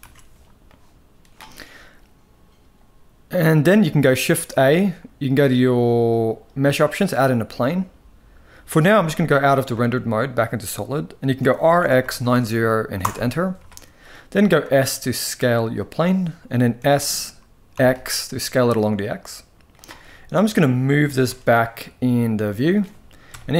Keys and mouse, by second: 4.2 shift+a, 8.6 z, 11.1 r, 14.0 s, 16.4 s, 19.7 middle drag, 20.7 g, 23.0 KP_0.